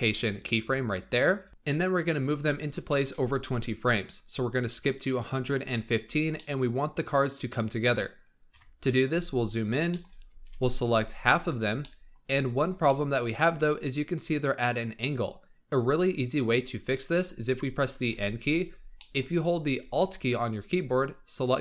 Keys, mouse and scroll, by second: 2.8-4.2 shift+middle drag, 4.2-6.0 drag, 6.0 scroll down 2, 6.3-6.7 middle drag, 6.7 scroll down 2, 8.4 KP_1, 9.2-9.8 scroll up 6, 9.8-10.4 shift+middle drag, 10.4 alt+a, 10.9 b, 11.7-12.3 shift+middle drag, 12.3-12.8 scroll up 4, 12.8-13.2 shift+middle drag, 13.2-15.1 scroll up 1, 16.7 scroll down 2, 18.0 n, 18.9-21.6 shift+middle drag.